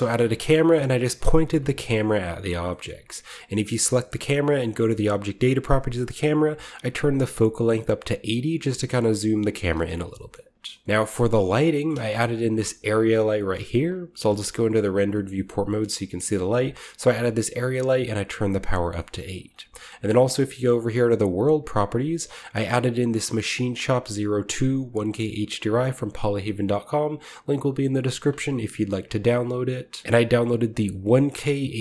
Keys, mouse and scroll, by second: 0.3-2.0 middle drag, 0.6-3.9 scroll up 1, 1.1 KP_0, 2.8-5.1 shift+middle drag, 3.4 g, 4.9-6.5 drag, 8.3 middle click, 8.4-9.9 drag, 10.1 shift+middle click, 10.8-11.7 ctrl+drag, 10.8 b, 11.7 middle click, 12.0-13.1 shift+scroll down 1, 12.4 g, 13.1-15.0 shift+middle drag, 13.8 z, 15.3 shift+middle click, 15.8-16.8 shift+middle drag, 15.9-17.7 shift+scroll up 1, 16.3 g, 17.2 right click, 17.7-20.4 middle drag, 20.7-23.1 drag, 30.9-31.8 drag.